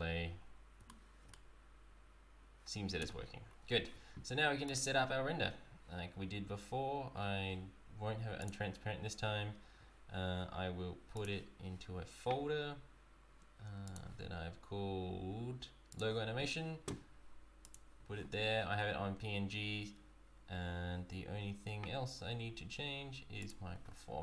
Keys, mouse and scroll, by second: 0.4 scroll up 2, 0.9 shift+middle click, 3.0 space, 3.5-3.9 scroll down 2, 4.7 click, 8.4 click, 11.2 click, 17.7 click, 20.2-20.5 scroll down 1, 23.4 click, 23.8-24.2 scroll down 1.